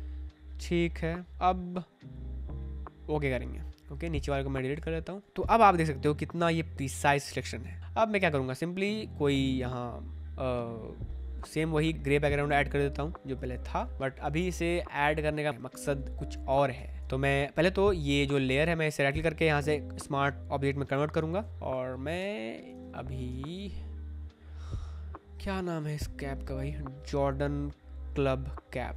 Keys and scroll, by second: 4.6 Delete, 5.2 space, 7.3 space, 13.8 v, 15.5 space, 21.5 Escape, 22.5 Tab.